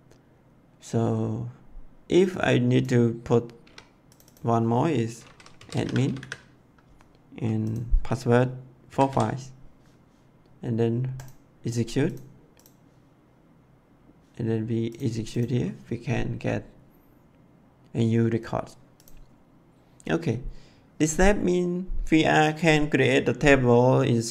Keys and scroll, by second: 3.5 2, 5.2-6.6 typing, 8.6-9.5 typing.